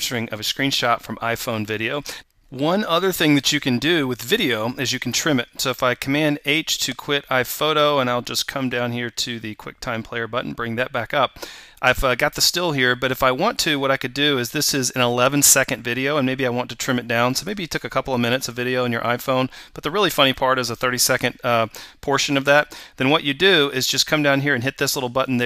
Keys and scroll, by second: 6.3 super+h.